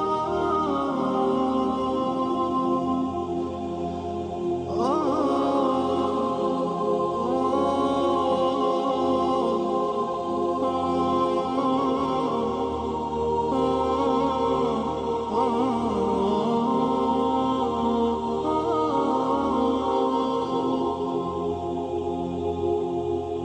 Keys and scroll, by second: 0.6 Left, 1.0 space, 5.2 Left, 10.1 ctrl+c, 10.2 b, 10.7 Down, 10.8 Down, 11.1 Down, 11.2 Down, 14.0 Up, 18.8 shift+Left, 19.4 Left, 21.1 shift+Left, 21.8 shift+Right, 22.6 ctrl+shift+g.